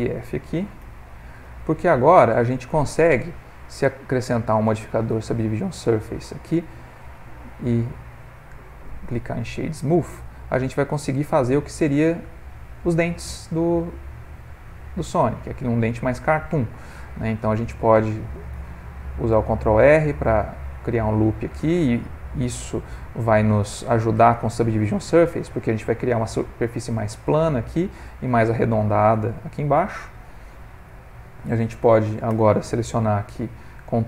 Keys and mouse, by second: 0.8 f, 1.2 middle click, 1.4 middle click, 2.3 ctrl+middle click, 3.8 click, 5.9 ctrl+middle click, 7.0 Tab, 7.4 right click, 9.4 middle click, 10.0 ctrl+middle click, 10.3 middle click, 14.5 middle click, 16.2 middle click, 16.3 middle click, 17.3 ctrl+middle click, 17.6 Tab, 18.5 ctrl+r, 21.1 middle click, 24.5 middle click, 25.2 middle click, 27.6 middle click, 27.8 middle click, 28.2 middle click, 28.6 middle click, 32.3 3, 32.7 click, 33.1 middle click, 33.9 ctrl+click.